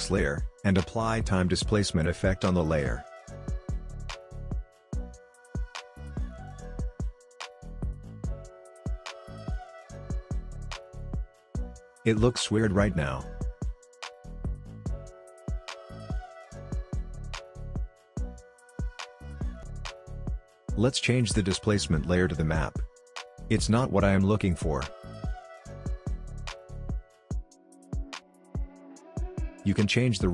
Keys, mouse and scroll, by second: 3.1-3.6 typing, 6.1-9.8 drag, 10.0-10.9 drag, 11.1-12.0 scroll up 2, 12.3 click, 12.6 space, 16.1 space, 16.9-25.7 drag, 25.7 space, 30.2 space.